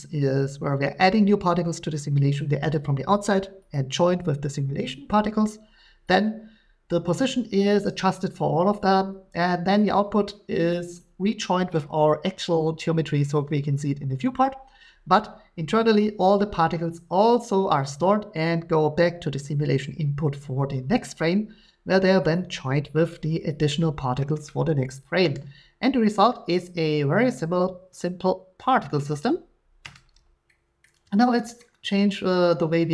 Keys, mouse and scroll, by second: 6.2 click, 9.8 click, 11.0 click, 22.3-23.3 drag, 30.8 middle click.